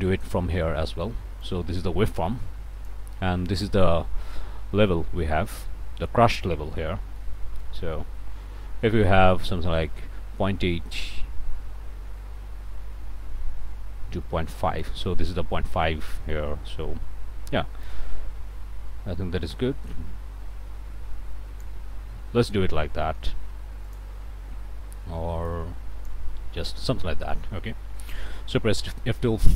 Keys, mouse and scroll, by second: 1.4-3.1 drag, 7.0 click, 7.6-15.0 ctrl+right drag, 29.1 F12.